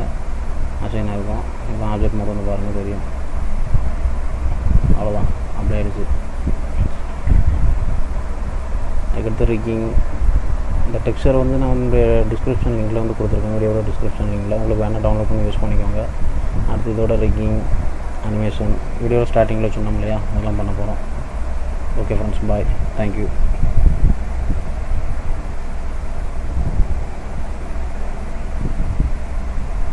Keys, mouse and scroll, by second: 1.2 click, 2.8 click, 3.4 click, 5.5 click, 5.5-5.8 scroll down 1, 5.8 click, 6.3 middle click, 6.8-7.3 scroll down 2, 7.3 middle click, 8.3 middle click, 10.0 middle click, 13.3-14.4 scroll up 1, 14.4-15.3 scroll down 1, 15.3 middle click, 15.3-15.9 scroll down 1, 15.9-16.2 scroll up 2, 16.5 middle click, 18.0 middle click, 19.5 shift+middle click, 20.0 shift+middle click, 20.4 middle click, 20.9-22.5 scroll down 2, 21.4 middle click.